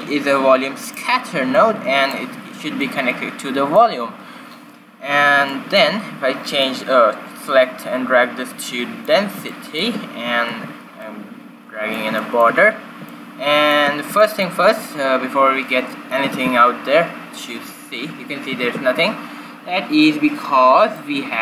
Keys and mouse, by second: 1.5-4.5 drag, 5.4-8.3 drag, 10.4 ctrl+b, 11.3 click, 16.6 shift+z, 18.6 shift+z, 19.9-21.4 drag.